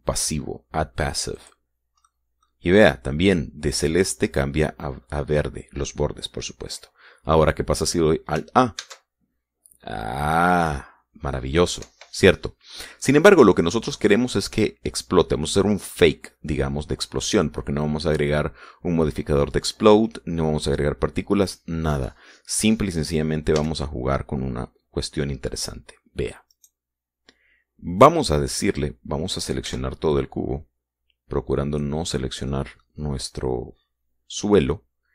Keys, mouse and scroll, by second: 2.1 click, 2.8 middle click, 3.5 middle click, 9.5 alt+a, 12.5 Escape, 13.5-14.8 drag, 15.4-16.4 shift+drag, 16.4-19.0 shift+middle drag, 19.4-21.5 middle drag, 24.3 a, 27.2 right click, 28.7-29.4 scroll down 1, 30.4 b, 30.8-32.7 drag, 33.2 click.